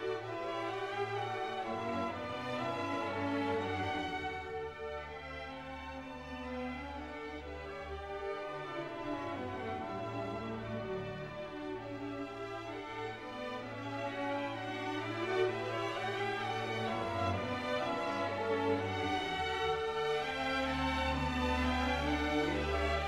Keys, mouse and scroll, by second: 1.5 middle click, 2.2 click, 6.9 click, 13.7-19.4 drag.